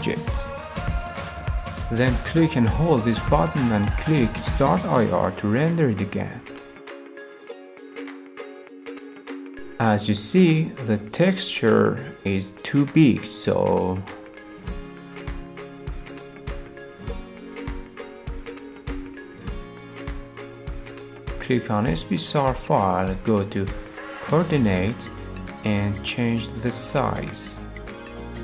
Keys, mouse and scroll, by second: 1.1-2.2 drag, 4.7-5.8 drag, 17.1 click, 19.1 scroll, 20.1 scroll, 20.5 middle click, 21.2 click, 21.2 scroll, 24.6-25.7 drag, 26.1-27.2 drag, 28.1-28.4 drag.